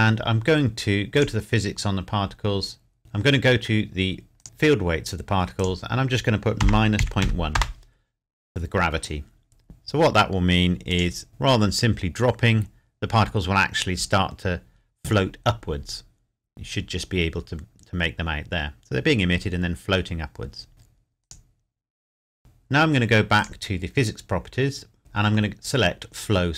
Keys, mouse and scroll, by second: 1.1 click, 1.8-3.4 scroll down 1, 4.4 click, 6.6 KP_Subtract, 7.0 KP_Decimal, 7.2 KP_1, 7.5 KP_Enter, 10.9 click, 11.9 scroll up 1, 16.6 scroll up 1, 18.4-18.7 scroll down 1, 21.3 click, 24.3-25.0 scroll up 1, 25.0 scroll down 1.